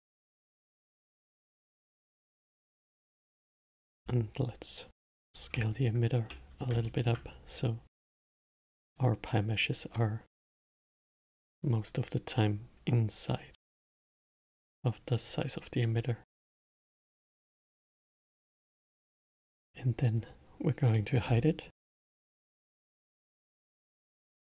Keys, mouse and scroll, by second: 0.5 click, 1.1 Tab, 2.8 alt+click, 4.2 s, 5.8 Tab, 7.2-8.7 alt+middle drag, 8.7-11.7 drag, 18.1 middle click, 18.5 scroll down 6, 19.0-20.5 middle drag, 20.5 click, 21.3 middle click, 21.6 scroll down 2, 22.0-23.0 middle drag, 23.0-24.5 scroll up 10.